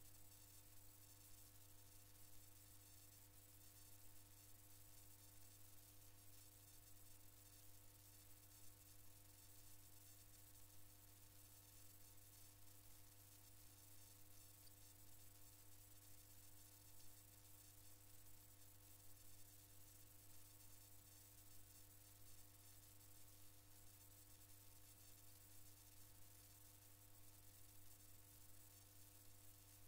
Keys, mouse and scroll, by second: 1.4 KP_1, 4.0 KP_2, 5.7 KP_3, 7.5 KP_4, 8.9 KP_5, 10.7 KP_0, 14.2 click, 17.6 click, 23.1 click, 25.6 click, 25.8-27.6 drag, 28.6-29.8 drag.